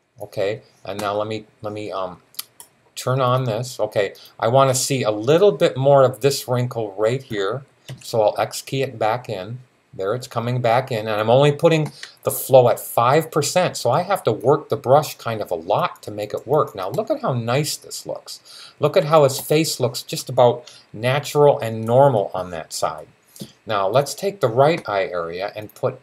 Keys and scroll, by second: 7.7 x.